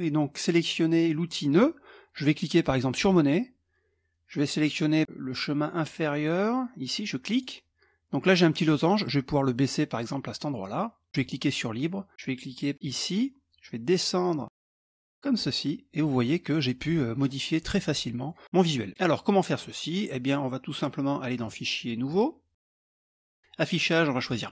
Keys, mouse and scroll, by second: 1.5 click, 3.0 click, 7.3 click, 9.1-11.1 drag, 11.2 click, 12.9 click, 14.4-16.1 drag, 16.3 middle click, 18.3 middle click, 18.9 middle click, 21.4 click, 22.1 click, 22.8 click, 23.8 click, 24.1 click.